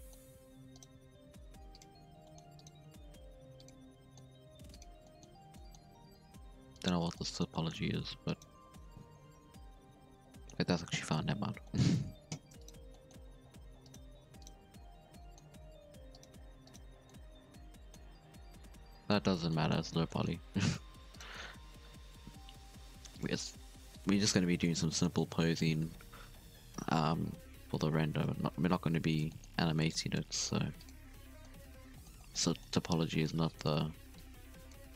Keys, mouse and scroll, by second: 0.1 Tab, 0.3 scroll up 3, 0.5 2, 0.7 right click, 0.9 x, 2.2 middle click, 2.4 1, 2.5 right click, 2.8 g, 3.8 scroll down 1, 3.9 middle click, 4.4 g, 5.0 middle click, 5.2 Tab, 5.4 scroll down 2, 5.5 middle click, 5.7 Tab, 5.9 3, 6.3 alt+a, 6.7 alt+shift+right click, 7.1 scroll down 1, 7.1 middle click, 7.8 alt+a, 8.2 alt+shift+right click, 8.7-10.7 middle drag, 10.7 alt+a, 10.9 middle click, 11.1 Tab, 11.5 scroll up 4, 11.6 middle click, 11.7 Tab, 12.3 alt+a, 12.6 alt+shift+right click, 12.8 scroll down 1, 12.9 middle click, 13.5 alt+a, 13.8 alt+shift+right click, 14.4 alt+shift+right click, 14.6 middle click, 15.5 alt+a, 16.1 alt+shift+right click, 16.6 alt+shift+right click, 17.1-18.2 middle drag, 18.2 alt+a, 18.4 Tab, 18.5 scroll down 4, 18.6-19.2 middle drag, 19.2 Tab, 19.4 scroll up 1, 19.5-21.0 middle drag, 21.0 1, 21.1 right click, 22.3 k, 24.8 scroll down 1, 24.9 middle drag, 25.2 Tab, 25.4-27.5 middle drag, 27.5 KP_0, 28.0 KP_7, 28.4 Tab, 28.8 scroll up 1, 29.0 z, 29.2 shift+middle click, 29.4 scroll up 3, 29.7 alt+a, 29.8 click, 30.2 g, 30.9 z, 31.1 scroll down 2, 31.1 middle click, 31.8 scroll down 1, 31.9 middle click, 32.7 alt+a, 33.2 click, 34.1-34.9 drag.